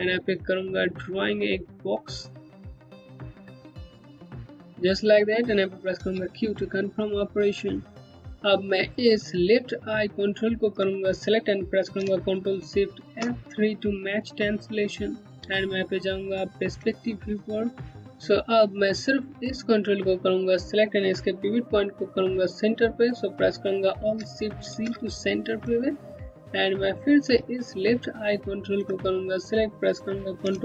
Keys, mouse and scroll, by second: 0.0-4.1 typing, 0.8 click, 2.1 click, 2.5 click, 3.2 click, 4.2 click, 5.6 typing, 6.1 scroll down 1, 8.7 ctrl+Num_Lock, 10.0 ctrl+click, 12.6 ctrl+shift+F3, 14.0 scroll down 1, 14.5 alt+click, 14.7 Home, 15.2 click, 15.5 space, 17.1 alt+click, 17.2 Home, 18.7 click, 18.9 Home, 23.6 alt+Num_Lock, 24.3 alt+shift+c, 28.2 ctrl+click.